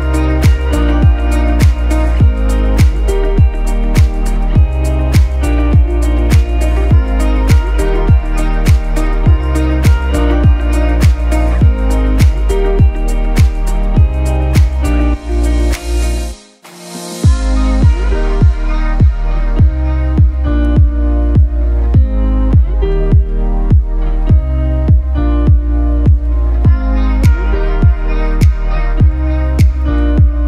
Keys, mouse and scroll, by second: 2.6 click, 3.2-3.6 scroll up 1, 3.8 z, 3.9 click, 4.1 space, 4.2 click, 19.2 click, 29.5 ctrl+z.